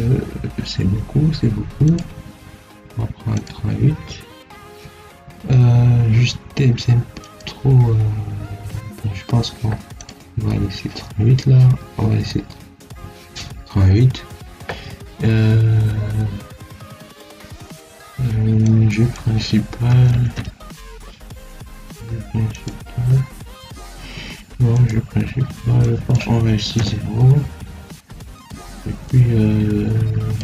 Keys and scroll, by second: 19.8 0, 20.0 ., 20.2 1, 26.7 0.